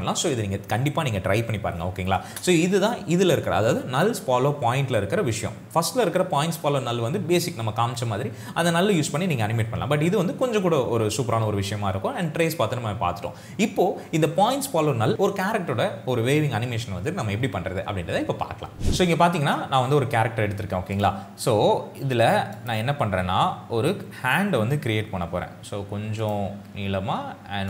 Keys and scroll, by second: 2.3 space.